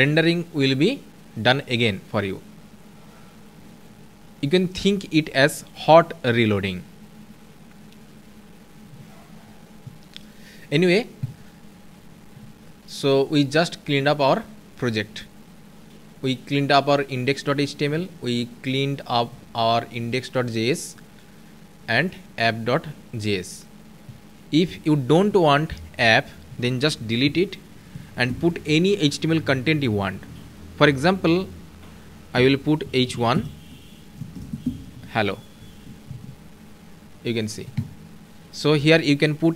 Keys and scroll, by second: 35.6 ctrl+s.